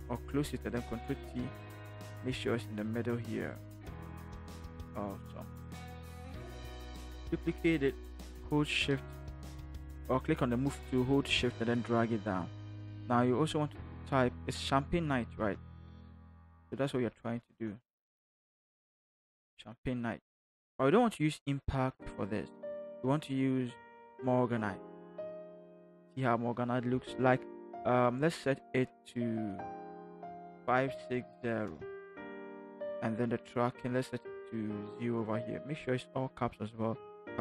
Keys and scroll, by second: 0.9 ctrl+t, 6.5 shift+Return, 7.2 ctrl+shift+j, 9.3 shift+v, 15.3 ctrl+c, 17.3 ctrl+v, 18.9 ctrl+v, 30.8-31.6 typing.